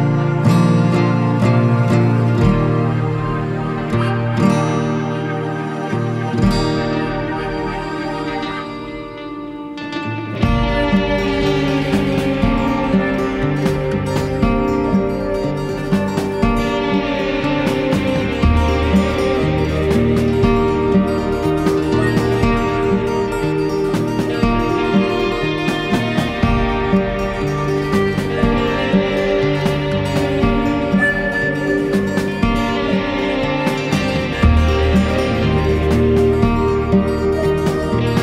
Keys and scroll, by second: 34.1 ctrl+z.